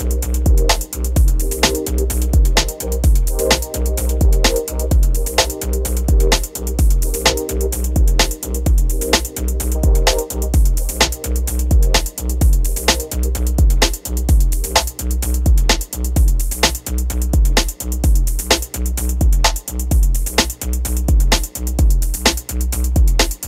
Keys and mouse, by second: 0.0-5.6 typing, 1.2 click, 3.4 ctrl+z, 5.2 click, 6.7 ctrl+c, 6.7 ctrl+p, 7.0 r, 7.2 space, 8.8 space, 10.2 click, 11.0 click, 11.3-13.8 typing, 12.0 drag, 12.3 click, 12.6 click, 14.3 click, 14.5 click, 15.0 g, 15.2 space, 16.3-18.2 typing, 16.3 ctrl+s, 19.4-23.4 typing, 19.8 ctrl+s.